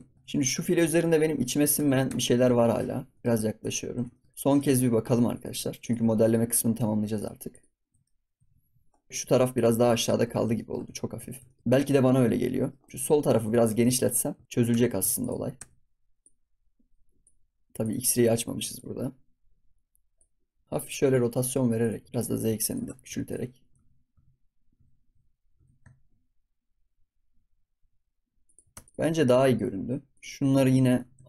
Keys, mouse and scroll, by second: 0.4 click, 0.8 ctrl+s, 1.1 KP_Decimal, 1.7 Tab, 2.0 Tab, 2.5 shift+middle click, 2.8 scroll up 8, 3.1 middle click, 3.6 click, 3.8 scroll down 1, 4.1 shift+middle drag, 4.5-5.3 drag, 5.7 shift+click, 6.2 shift+click, 7.1 shift+click, 7.4 shift+click, 8.3 KP_Divide, 9.1 Tab, 9.2 Tab, 9.5 click, 9.7 Tab, 9.9 click, 10.3 ctrl+s, 10.5 shift+middle click, 10.8 scroll up 2, 11.2 ctrl+s, 11.4-12.9 shift+middle drag, 12.9 s, 13.5 ctrl+s, 13.8-14.4 shift+middle drag, 14.4 Tab, 14.6 Tab, 15.1 shift+click, 15.5 Tab, 16.1 click, 17.6 ctrl+z, 17.7 click, 20.6 r, 21.9 g, 22.8 Tab, 23.0 scroll down 2, 23.2 click, 23.7 ctrl+z, 24.1 ctrl+z, 24.7 ctrl+z, 25.4 g, 28.6 Tab, 28.8-29.2 scroll down 1, 29.2 click, 30.1 click, 30.8 g.